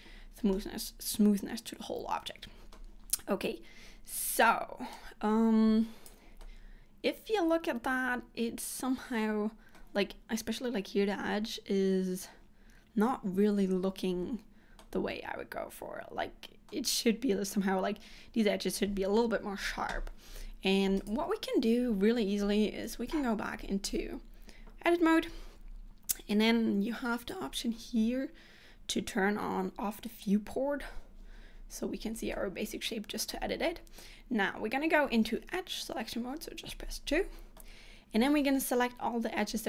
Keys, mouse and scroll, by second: 0.7 middle click, 4.4 click, 5.0 click, 6.6 middle click, 14.9 middle click, 21.1 click, 23.0 Tab, 26.4 click, 30.2 click, 32.4 middle click, 35.6 2, 37.7 middle click.